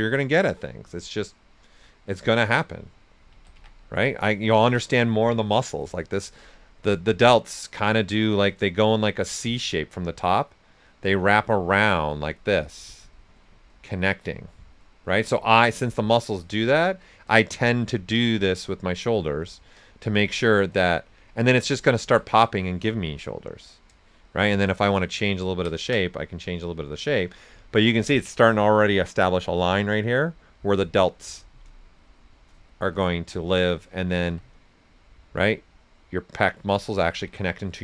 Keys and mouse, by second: 1.4 alt+click, 1.8 alt+right click, 2.1-4.0 typing, 2.2 click, 4.0 click, 6.7 right click, 7.2 click, 8.6 right click, 8.6 typing, 10.8 click, 15.5 right click, 15.9 click, 17.7 right click, 18.1 click, 19.0 right click, 19.5 click, 21.0 right click, 22.4-24.2 shift+drag, 24.2 shift+click, 25.4 ctrl+right click, 30.5 click, 32.7 s, 32.8-34.2 drag, 34.2 s, 34.3-36.7 drag, 35.7 typing, 36.7 right click.